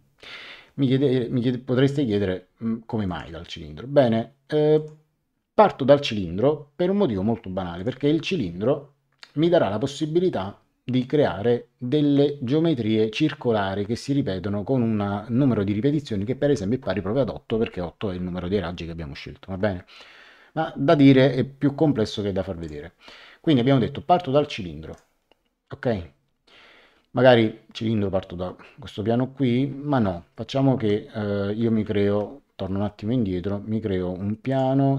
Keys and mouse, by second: 3.0 click, 4.7 click, 7.7 click, 22.6 click, 24.9 click, 30.7 Escape, 31.8 ctrl+z, 34.4 click.